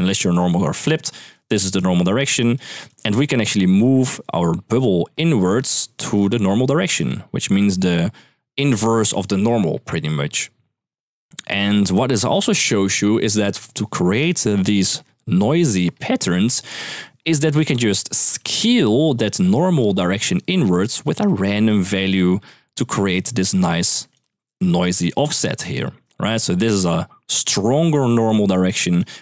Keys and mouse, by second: 1.1 click, 1.4 click, 2.2 click, 2.5 click, 4.1-5.3 d, 5.5-8.7 d, 5.7 click, 6.7 click, 9.1 d, 14.1-16.4 d, 14.3 click, 18.1-29.2 typing, 18.3 click, 20.0 click, 20.6 click, 21.9 click, 22.6 click, 28.4 click.